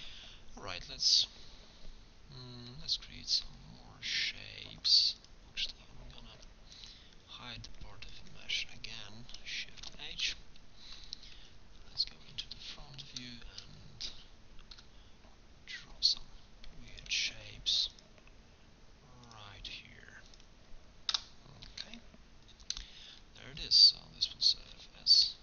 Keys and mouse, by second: 0.2-2.7 middle drag, 4.7 ctrl+Tab, 6.4 c, 9.8 shift+h, 11.4 KP_1, 15.0 k.